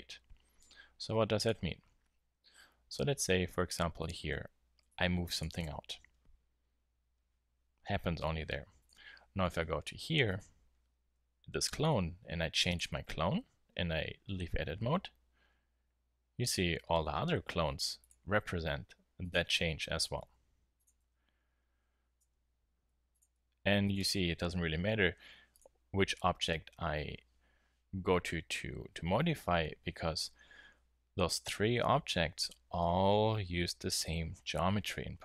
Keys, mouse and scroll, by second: 2.2 Tab, 3.3 middle click, 4.9 g, 5.6 Tab, 9.6 Tab, 11.5 g, 14.4 Tab, 18.0-22.1 drag, 18.5 Tab, 20.2 g, 21.0 Tab, 22.2 Tab, 22.9 Tab, 23.3 Tab, 24.9 g, 26.1 Tab.